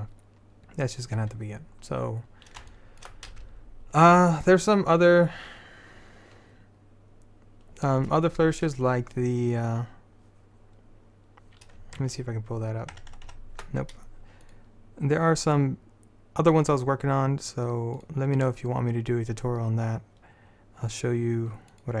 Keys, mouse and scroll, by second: 1.9-3.0 middle drag, 1.9-3.0 scroll up 1, 14.6-17.2 drag, 18.1-22.0 drag.